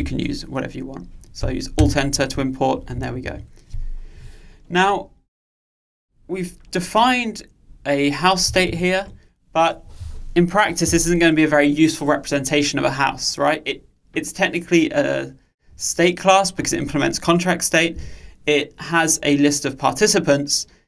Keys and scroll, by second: 1.9 alt+Return, 8.7 ctrl+alt+o.